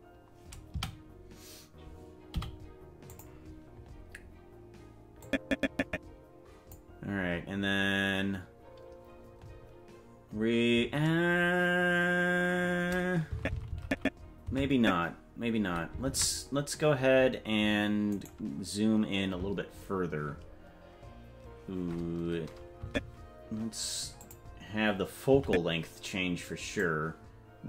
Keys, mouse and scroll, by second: 1.0 a, 2.6 i, 5.3-6.9 drag, 13.5 Left, 13.9 Left, 14.2 Left, 14.8 Left, 16.3 ctrl+Tab, 18.3 right click, 23.1 Left, 24.5 click, 25.7 Right, 27.1-27.6 drag.